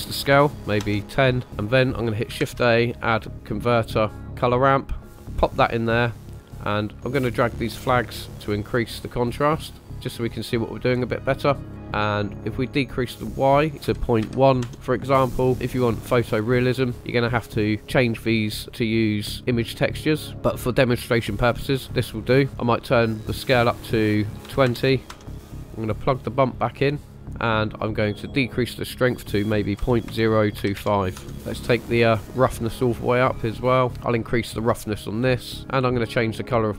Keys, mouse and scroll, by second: 1.4 shift+a, 2.4 shift+a, 7.3-8.7 drag, 9.3-10.8 drag, 11.6 middle click, 12.8-14.6 drag, 18.6 middle click, 18.6 scroll down 2, 20.3 scroll up 3, 22.7-25.1 drag, 25.2 middle click, 25.2 scroll down 3, 26.5-27.3 drag, 28.2 click, 31.3 middle click, 32.1 click, 33.9 click, 33.9 shift+middle click, 33.9 scroll down 3, 35.3 click, 36.2 click.